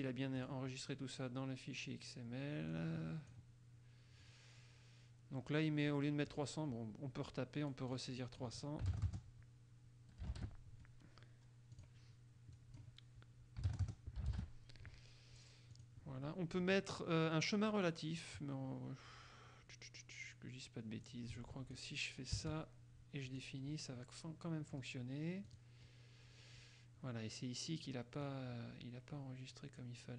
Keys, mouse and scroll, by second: 0.5 click, 2.9-3.7 drag, 6.5 click, 7.9 9, 8.1 click, 9.0 KP_3, 10.5 ctrl+Return, 11.9 click, 12.7 click, 13.8 KP_3, 14.3 ctrl+KP_0, 14.5 ctrl+Return, 15.9 click, 21.2 click, 22.5 BackSpace, 23.4 click, 25.6 click, 28.4-30.1 drag.